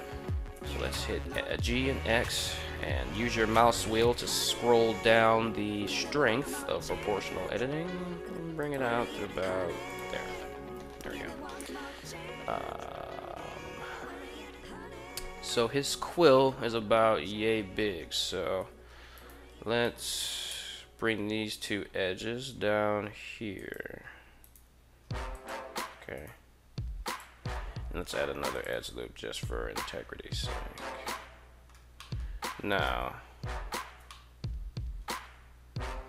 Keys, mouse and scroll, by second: 0.3 g, 1.1 x, 8.4 click, 9.0 r, 9.6 click, 10.4 KP_3, 15.4 shift+middle click, 18.5 2, 18.9 right click, 19.6 shift+right click, 20.2 g, 23.3 click, 24.2 right click, 24.7 g, 25.1 drag, 26.0 right click, 26.1 g, 26.9 click, 28.0 ctrl+r, 28.5 right click, 30.6-31.5 middle drag, 31.9 middle click, 32.4 right click, 33.8-35.7 middle drag, 35.9 middle click.